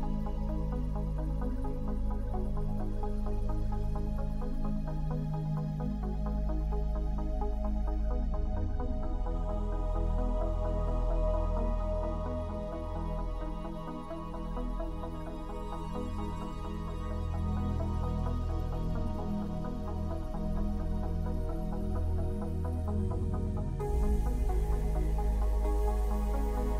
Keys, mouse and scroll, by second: 0.8 shift+click, 2.4 shift+click, 3.0 shift+click, 3.9 click, 6.1 right click, 6.9 click, 8.6 Tab, 10.0 middle click, 10.6 shift+middle click, 11.2 shift+middle click, 12.3 shift+click, 14.0 ctrl+click, 16.3 ctrl+middle click, 16.6 ctrl+middle click, 17.2 ctrl+middle click, 19.4 click, 21.1 super++, 24.1 super+click.